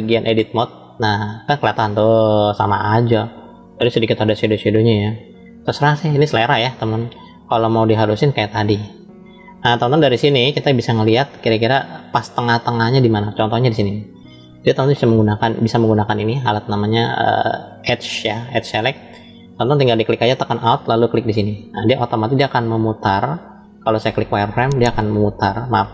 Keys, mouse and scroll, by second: 2.1-6.4 middle drag, 6.4 click, 6.5-9.6 middle drag, 10.1 shift+middle click, 11.3 scroll up 1, 12.1 shift+middle click, 18.3 click, 21.2 alt+click, 24.0 click, 25.7-25.9 drag.